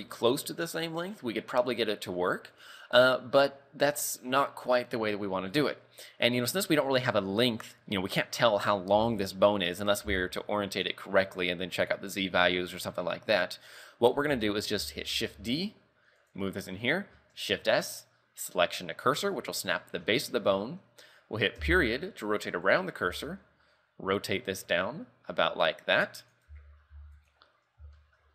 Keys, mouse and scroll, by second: 2.6-3.3 scroll down 1, 3.3 scroll down 1, 4.4 scroll down 4, 8.0-9.7 scroll up 3, 13.3-13.7 scroll down 5, 14.5 shift+middle click, 15.2 shift+d, 17.4 shift+s, 21.7 ., 23.2 r, 26.6 z, 27.0 z, 27.3 right click, 28.1 shift+middle click.